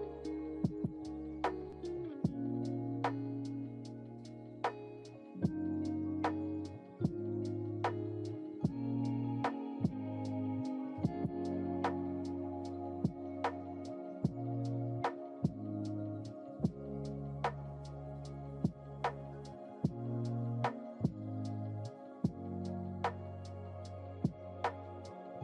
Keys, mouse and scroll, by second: 0.1-9.5 drag, 10.4 ctrl+z, 16.6 click, 17.7 click, 19.1 ctrl+z, 19.7 ctrl+z, 22.1 space, 22.7 space, 24.5 click.